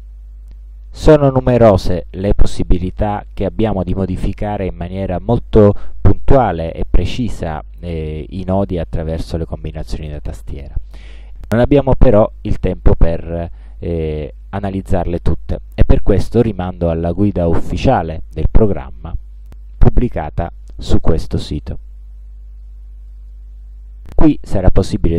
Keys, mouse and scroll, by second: 17.1 click, 20.7-22.9 drag, 23.2 click, 24.6-25.1 scroll down 1.